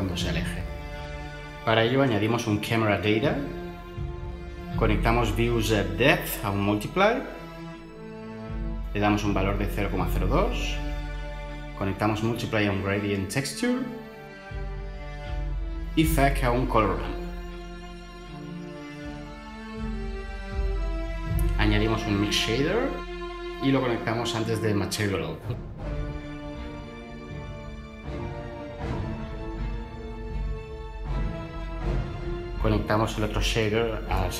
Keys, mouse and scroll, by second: 1.2-1.6 typing, 2.3 Return, 6.2 typing, 6.5 shift+Return, 9.4-9.8 typing, 10.4 Return, 12.5-13.2 typing, 13.3 Return, 16.5-17.3 typing, 17.5 Page_Down, 17.7 Return, 21.3 ctrl+shift+a, 21.4-22.6 typing.